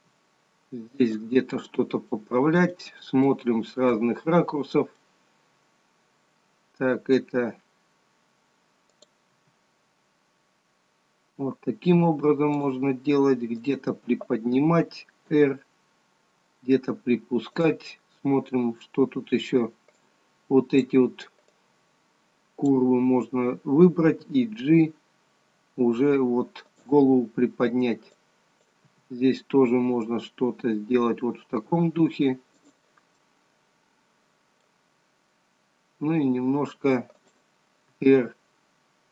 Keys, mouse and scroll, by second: 0.1 g, 2.3 middle click, 3.4 middle click, 4.5-5.2 scroll up 2, 5.2 middle click, 9.1 click, 9.5 g, 13.7 click, 15.5 r, 18.0 scroll down 4, 18.8-20.1 scroll up 2, 20.1 click, 21.6 click, 24.3 g, 28.3 click, 29.0 g, 33.4 middle click, 36.2 g, 38.0 r.